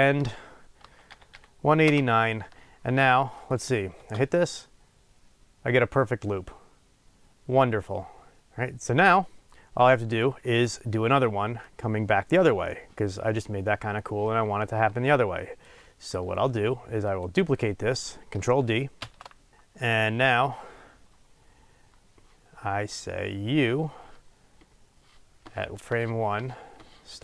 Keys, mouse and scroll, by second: 3.4 click, 3.9 space, 5.5-9.3 drag, 11.6-17.3 drag, 19.0 shift+d, 19.5 click, 19.7-23.2 middle drag, 20.7-23.2 scroll down 2, 23.2-27.2 drag.